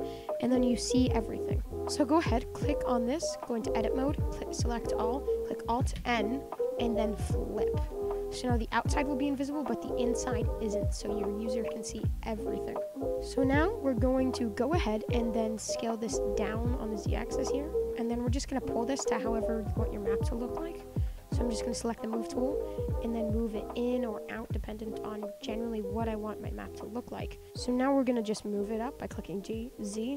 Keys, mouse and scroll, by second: 2.0 click, 2.3-3.3 middle drag, 3.3 Tab, 3.8 a, 5.9 alt+n, 7.9 Tab, 8.3 middle drag, 8.6 click, 8.8-9.4 middle drag, 9.4 scroll up 3, 9.6-10.5 shift+middle drag, 10.5-11.0 shift+scroll down 6, 11.0-13.2 middle drag, 13.2 click, 13.6-16.1 middle drag, 16.1 s, 17.6-17.9 middle drag, 17.9 scroll up 4, 18.2 middle drag, 18.4 Tab, 18.6 scroll down 4, 18.8 middle click, 19.2 click, 19.8 middle click, 20.5-21.2 scroll up 1, 21.2 click, 21.4-22.4 shift+scroll up 3, 21.5 shift+middle click, 22.4 click, 22.9 middle click, 23.3-23.7 scroll down 1, 23.7 click, 24.4 click, 24.9 shift+middle click, 25.7 click, 26.4 click, 27.0 middle click, 27.4 ctrl+z, 27.9-29.4 shift+middle drag, 29.4 g.